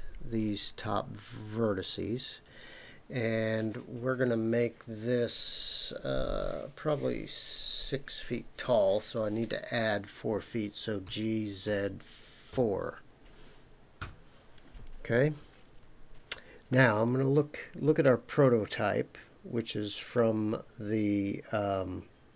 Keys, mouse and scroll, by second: 0.3 shift+click, 1.8 shift+click, 11.0 g, 11.6 z, 12.5 KP_4, 14.0 KP_Enter.